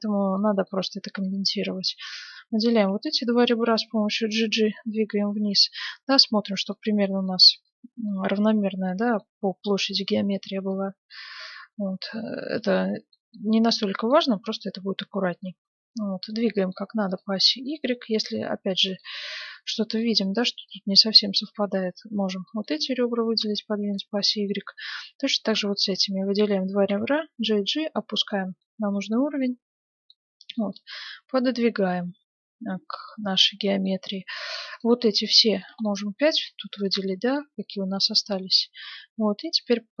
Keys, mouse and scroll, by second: 0.6-3.2 middle drag, 1.1-4.5 right drag, 3.5 g, 6.8-11.5 middle drag, 10.7-13.2 drag, 12.9-15.0 middle drag, 14.5-16.2 drag, 16.5-19.0 middle drag, 17.0-18.8 right drag, 18.9-20.4 right drag, 19.4-20.8 middle drag, 20.6-22.3 drag, 22.5-26.5 middle drag, 23.8-27.1 right drag, 26.8 g, 28.6-31.0 middle drag, 30.7-32.4 drag, 33.4-35.5 middle drag, 34.7-36.3 right drag, 35.9 middle click, 37.2-40.0 middle drag, 37.2-39.6 right drag.